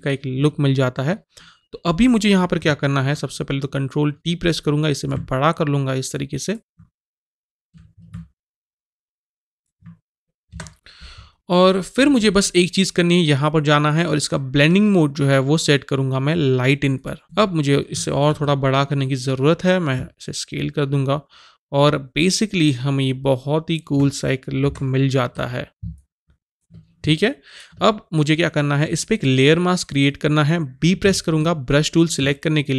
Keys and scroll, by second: 3.0 ctrl+t, 10.5 Return, 18.3 ctrl+t, 24.6 Return, 31.1 b.